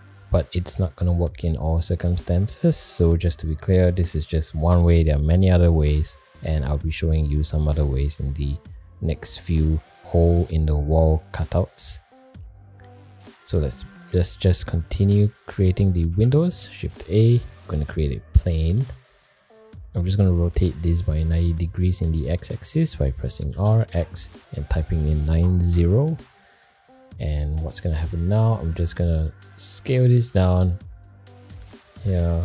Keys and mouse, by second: 0.1 middle click, 1.1 middle drag, 8.1 middle click, 9.6 middle drag, 10.5-10.8 middle drag, 12.3 middle click, 13.2 middle click, 13.9 click, 15.3 middle click, 16.7 shift+a, 18.7 g, 23.5 r, 27.9 middle drag, 29.2 middle drag, 30.2 s, 32.0-32.4 middle drag.